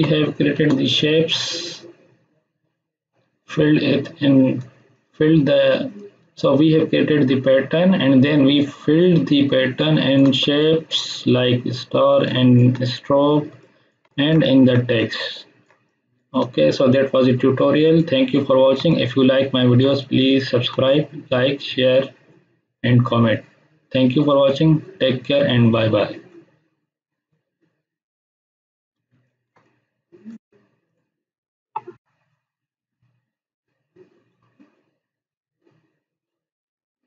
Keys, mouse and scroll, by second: 1.3-1.9 scroll up 1, 4.7 space, 4.9-10.2 ctrl+drag, 12.1 space, 12.2-12.8 click, 12.6 space, 13.6 click, 14.0 ctrl+space, 14.1 ctrl+click, 14.4 click, 14.9-16.2 ctrl+click, 18.4-18.7 scroll up 1, 18.7 space, 18.8 ctrl+click, 19.1-19.8 ctrl+drag, 29.0 space, 29.2 ctrl+click, 29.6-30.5 click.